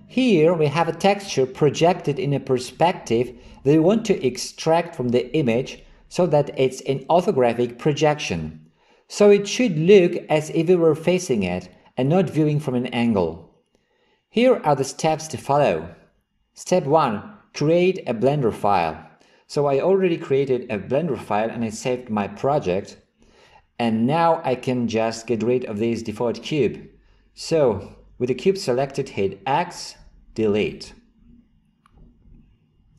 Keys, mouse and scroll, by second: 29.6 x.